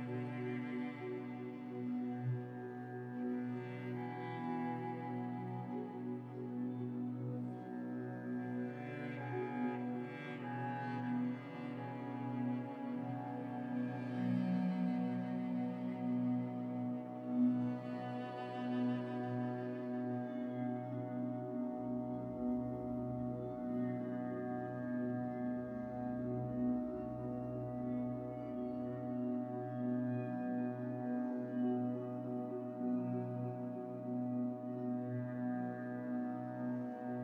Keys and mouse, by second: 3.3 click, 3.7 g, 7.0 click, 7.5 g, 14.0 click, 14.3 g, 25.9 click, 26.3 g, 30.2 click, 30.4 g.